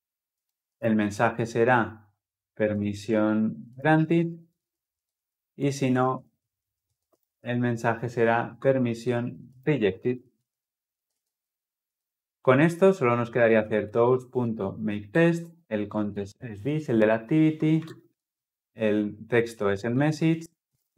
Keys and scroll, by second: 11.0 ctrl+alt+l, 11.8 ctrl+alt+o, 15.0 Return, 18.0 ctrl+p.